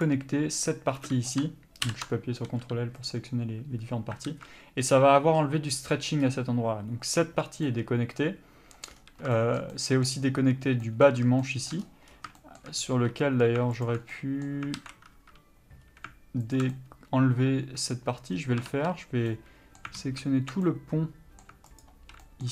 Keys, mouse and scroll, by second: 0.2 click, 1.4 b, 2.0 ctrl+l, 2.6 g, 4.4 alt+a, 6.4-7.8 scroll up 1, 7.8 middle click, 9.1 scroll down 1, 9.5 shift+middle click, 12.0-12.5 scroll up 1, 12.5 shift+middle click, 12.9 scroll up 1, 13.1 3, 14.0 alt+click, 14.3 middle click, 14.9 alt+a, 15.3 1, 16.0-16.7 scroll up 1, 16.7 alt+click, 17.0 middle click, 18.4-19.4 scroll up 1, 19.4 middle click, 20.1 alt+a, 20.8 middle click, 22.0 alt+click, 22.4 middle click.